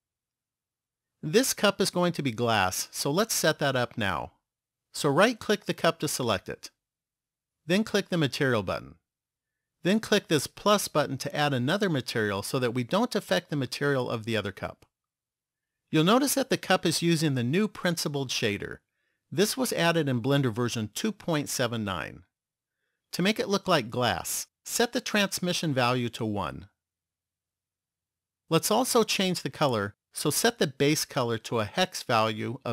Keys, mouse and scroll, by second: 5.4 right click, 8.5 click, 11.6 click, 21.9 click, 25.2 click, 29.3 click.